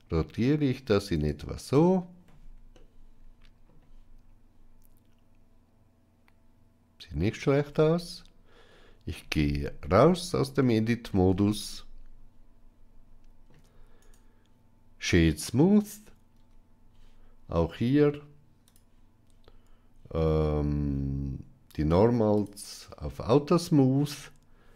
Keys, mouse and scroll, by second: 2.6 middle click, 7.5 Tab, 9.8-10.2 middle drag, 10.5-11.0 shift+middle drag, 11.3-13.3 ctrl+middle drag, 13.9-15.2 right drag, 22.2 click.